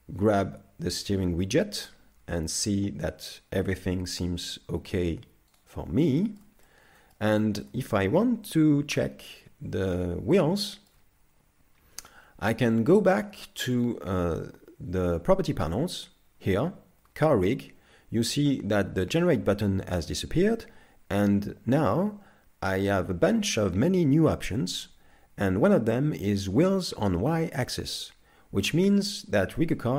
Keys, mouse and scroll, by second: 6.2 shift+middle click, 6.7 middle click, 7.4 shift+middle click, 8.5 KP_3, 9.1 scroll up 3, 9.6-10.0 scroll down 2, 10.4 shift+middle click, 11.8 KP_5, 12.4-13.1 scroll up 5, 13.4 shift+middle click, 29.7 middle click.